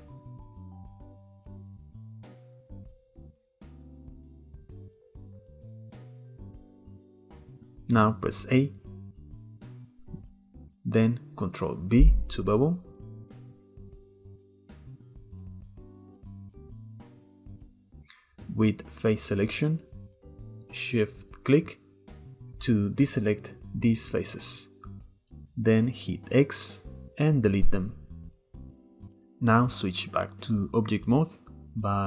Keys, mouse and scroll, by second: 0.2 k, 5.2-6.6 shift+middle drag, 6.6 click, 7.2 shift+middle click, 8.4 a, 10.9 ctrl+b, 18.0-19.0 shift+middle drag, 19.0-20.1 drag, 20.9 shift+click, 21.9 shift+click, 25.6 x, 28.4-30.5 middle drag, 30.5 Tab.